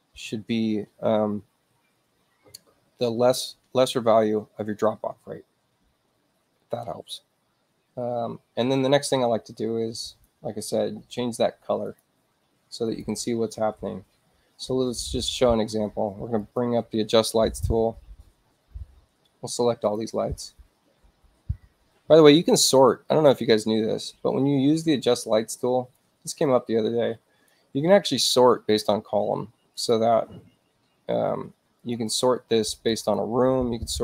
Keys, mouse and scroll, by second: 10.1 click, 11.8 click, 12.8 click, 16.4 click, 19.8 click, 25.1 click, 26.4-27.5 drag, 29.7 click, 31.8 click, 32.0 click, 32.7 click, 33.0 click.